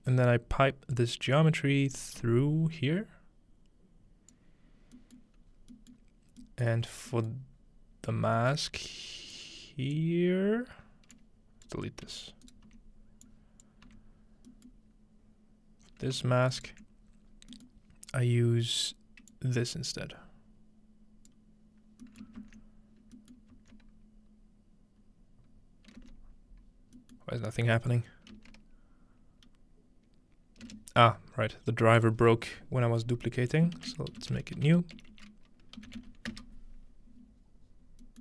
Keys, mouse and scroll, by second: 1.6-5.6 drag, 5.6-9.5 middle drag, 5.6-7.5 scroll down 1, 7.5 scroll down 1, 7.6-9.5 scroll up 1, 9.5-15.6 drag, 13.6 right click, 13.6 typing, 15.6-19.6 middle drag, 17.6-19.6 ctrl+right drag, 17.6-19.6 ctrl+scroll down 1, 19.6-22.7 drag, 21.5-26.4 middle drag, 22.4 ctrl+space, 26.4 space, 28.4-30.4 drag, 28.4 space, 32.4-34.2 drag, 32.4-34.2 scroll up 1, 34.3-34.7 typing.